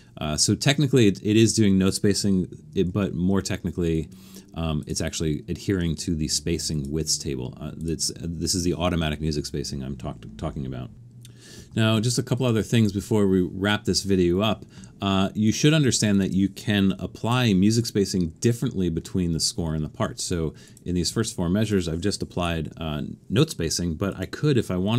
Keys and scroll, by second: 2.9 alt+super+a, 16.9 shift+4, 22.4 shift+4.